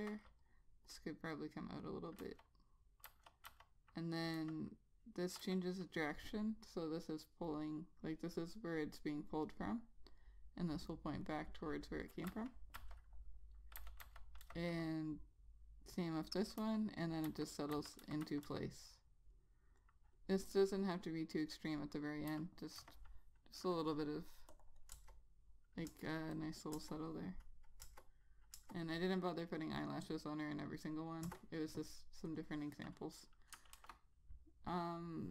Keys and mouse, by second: 0.7 click, 2.4 click, 3.3 ., 3.7 ., 4.6 ,, 11.0 click, 12.5 click, 13.0 ., 14.3 ., 14.7 ,, 15.5 click, 16.8-18.7 typing, 19.6 click, 22.6 ., 24.1 click, 25.2 Return, 26.1 Return, 26.6 click, 28.1 Return, 28.8 Return, 31.5 Return, 32.5 click, 33.8 click, 34.0 ctrl+s.